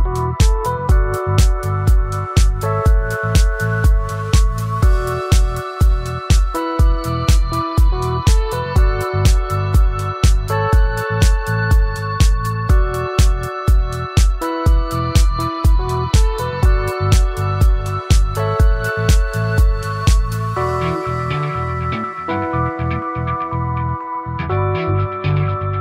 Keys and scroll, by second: 20.1 ctrl+z.